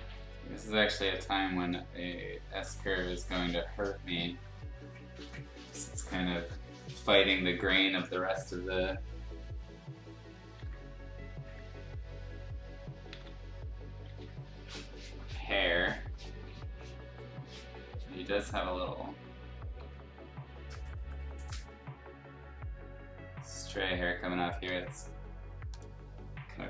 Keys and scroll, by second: 0.9 ctrl+z, 1.9 ctrl+z, 2.7 ctrl+z, 3.7 ctrl+z, 10.5 ctrl+z, 13.1 ctrl+z, 14.0 ctrl+z, 15.5 ctrl+z, 19.8 ctrl+z, 24.6 ctrl+z.